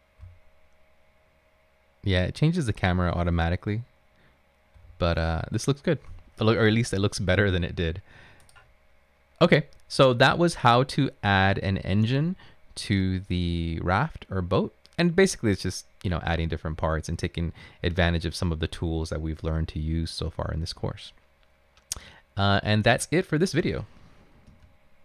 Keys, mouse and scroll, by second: 0.0-6.7 typing.